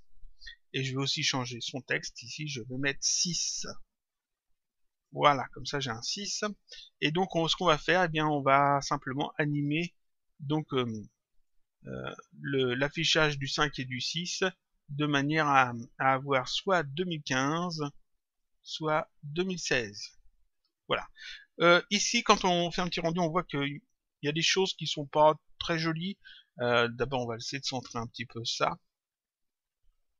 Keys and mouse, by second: 1.4 click, 4.8 click, 6.4 middle click, 9.1 click, 10.7 click, 13.3 click, 16.5 click, 18.3 click, 20.8 click, 22.7 click, 27.0 click, 29.2 click.